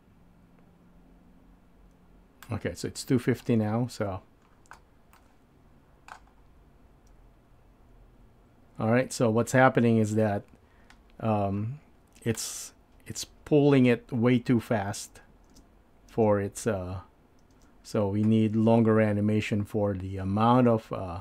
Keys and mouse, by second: 3.3 space, 5.3 middle click, 10.2-12.5 drag, 15.6 space, 16.4 space.